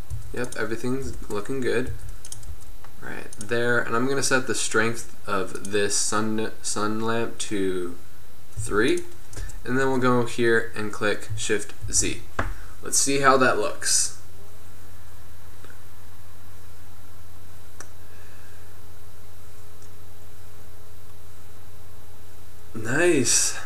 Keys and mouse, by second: 0.0-2.6 typing, 4.8-6.0 drag, 9.5 KP_0, 12.8 shift+z, 21.4-23.6 middle drag.